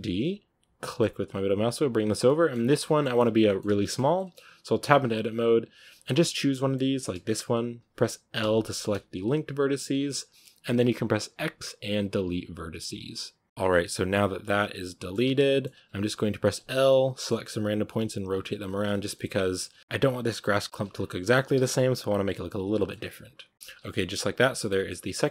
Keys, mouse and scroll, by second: 0.0 shift+d, 2.1-3.9 middle drag, 3.9 scroll up 2, 4.1-4.7 middle drag, 4.7 Tab, 5.7 a, 6.0-8.3 middle drag, 8.3 l, 10.0-13.5 middle drag, 13.5 x, 13.6-15.1 middle drag, 15.1 Tab, 15.3-15.6 middle drag, 15.6 Tab, 16.3 right click, 16.4-20.1 typing, 16.7-17.2 middle drag, 18.8 middle click, 20.7 Tab, 20.8 scroll down 4, 20.9-21.5 middle drag, 21.5 z, 21.6-22.8 middle drag, 22.8-23.3 scroll up 5, 23.5 middle drag, 23.6 a, 23.8 scroll down 3, 23.8-25.3 middle drag.